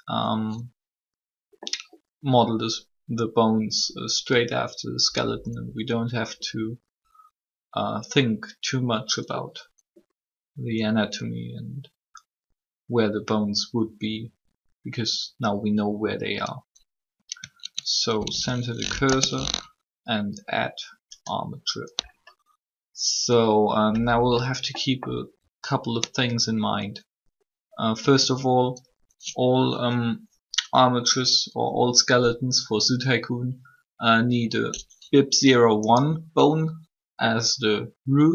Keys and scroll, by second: 17.9 shift+c, 18.9 space, 28.0 Tab.